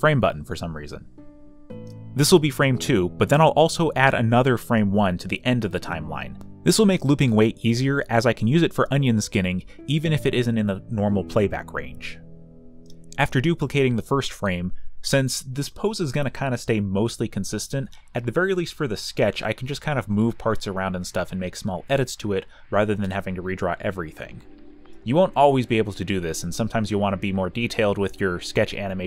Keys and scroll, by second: 2.3 ctrl+j, 8.2 d, 9.7 v, 10.6 ctrl+t, 11.4 Return, 11.6 m, 11.9 ., 14.3 a, 20.1 ctrl+t.